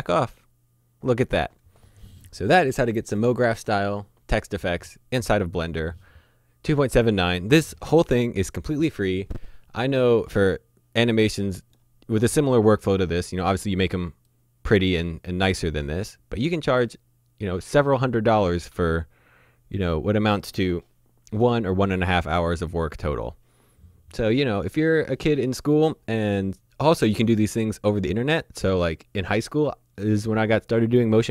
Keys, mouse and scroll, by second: 14.3 middle click, 17.7-18.8 scroll down 1, 21.4 shift+Num_Lock, 21.4 scroll down 1, 21.7 middle click.